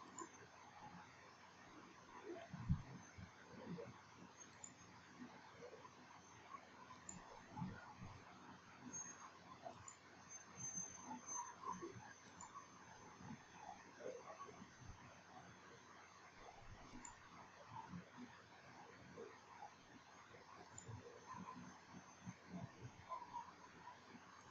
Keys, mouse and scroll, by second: 0.4 ctrl+click, 4.8 ctrl+click, 7.2 ctrl+click, 10.0 ctrl+click, 12.5 ctrl+click, 17.2 ctrl+click, 20.9 ctrl+click.